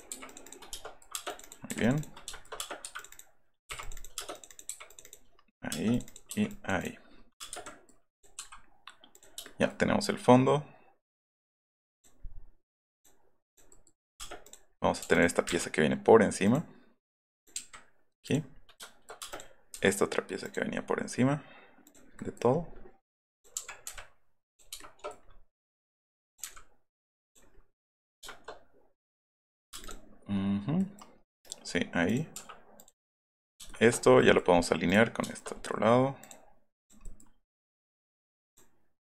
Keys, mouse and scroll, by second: 0.1 t, 0.3 click, 0.4 click, 0.7 shift+middle click, 1.1 space, 1.7 p, 2.3 shift+middle click, 2.5 space, 2.9 click, 3.1 click, 3.8 click, 3.9 click, 4.1 space, 4.3 click, 4.5 click, 4.9 click, 5.3 middle click, 5.7 space, 5.9 click, 6.2 p, 6.5 middle click, 6.8 middle click, 7.1 middle click, 7.4 space, 7.5 Escape, 7.6 middle click, 8.1 click, 8.4 m, 9.1 click, 11.9 click, 12.9 click, 13.4 click, 14.0 middle click, 14.2 space, 14.4 click, 15.1 click, 16.4 click, 17.3 click, 18.2 click, 18.5 middle click, 19.2 space, 19.3 click, 20.4 click, 21.8 click, 22.1 middle click, 22.1 scroll, 23.3 click, 23.5 Right, 23.8 Left, 24.5 click, 26.2 click, 26.4 Left, 27.3 click, 27.6 middle click, 27.9 middle click, 29.7 middle click, 29.7 space, 29.8 click, 30.0 middle click, 30.3 middle click, 31.2 middle click, 32.1 click, 32.8 click, 33.1 middle click, 33.5 middle click, 33.6 shift+middle click, 34.2 shift+middle click, 34.5 middle click, 34.9 click, 35.2 scroll down 1, 36.2 click, 36.4 scroll up 1, 36.8 click, 38.5 click.